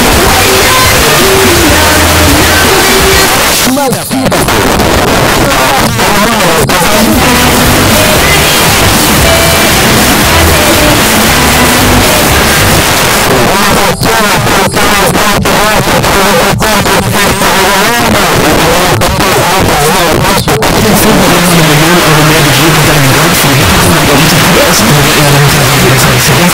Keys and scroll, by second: 3.3 Page_Down, 12.8 Page_Down, 26.4 space.